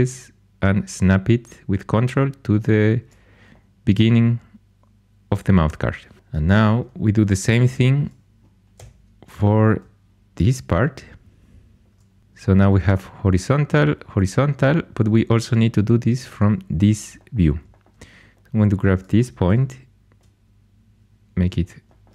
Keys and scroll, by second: 8.7 g, 19.4 g.